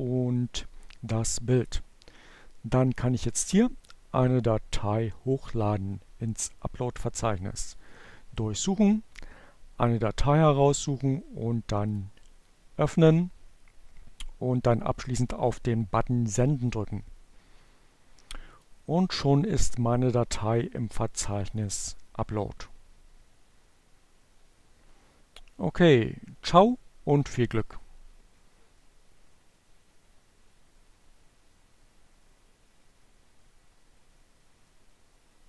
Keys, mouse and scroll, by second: 4.0 click, 8.0 click, 9.9-11.1 drag, 15.5 click, 17.8 click, 19.4-21.1 drag.